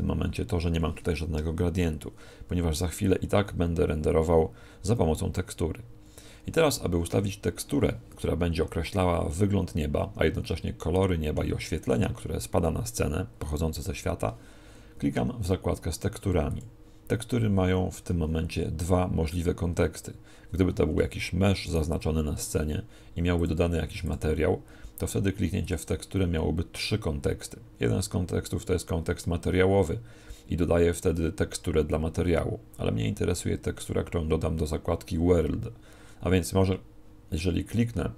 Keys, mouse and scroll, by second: 21.0 Escape, 21.6 right click, 23.4 click, 33.8 click.